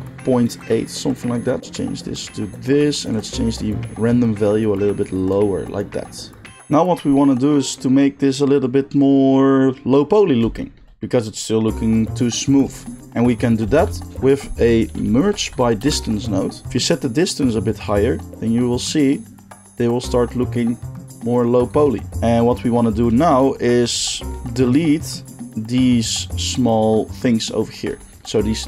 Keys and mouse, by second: 6.6-12.7 middle drag, 13.6 shift+a, 16.9-28.6 shift+drag.